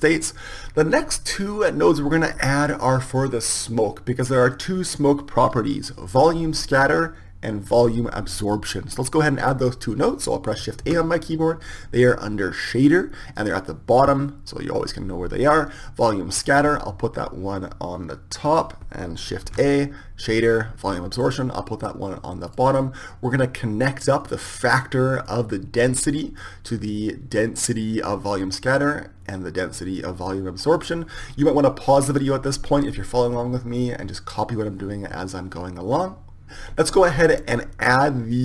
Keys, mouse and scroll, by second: 10.9 shift+a, 19.6 shift+a, 25.5-30.9 drag, 37.9-38.4 drag.